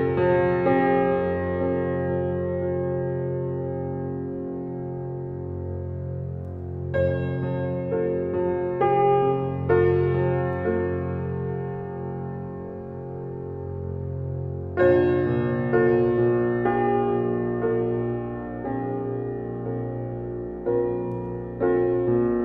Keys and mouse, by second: 0.0 shift+Up, 0.3 shift+Up, 2.6 click, 5.9 click, 9.3 ctrl+s, 12.4 click, 14.8 click, 16.5-17.5 drag, 18.1 typing, 20.1 typing, 21.2-22.4 typing.